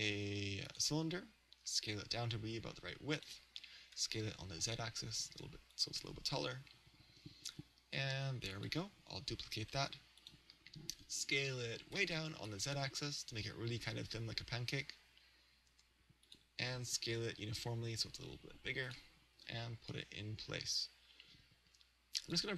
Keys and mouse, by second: 1.7 s, 3.3 click, 4.0 s, 5.8 click, 6.7 g, 8.6-12.0 drag, 9.6 shift+d, 12.0 s, 16.4 click, 17.0 s, 19.0 click, 19.4 g, 22.3 click.